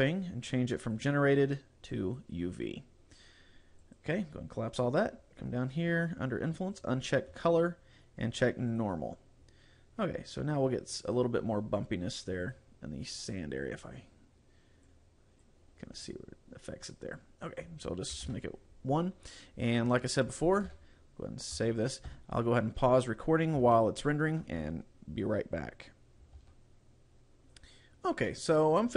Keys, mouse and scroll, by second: 1.0 click, 3.8 click, 5.4 scroll down 2, 6.8 click, 8.8 click, 9.4-10.3 scroll up 2, 11.6-12.4 scroll down 2, 12.4 click, 13.1-13.5 scroll up 2, 14.9 click, 17.5 click, 20.7 ctrl+s, 22.1 KP_0, 23.0-23.6 scroll up 1, 23.8 shift+middle click.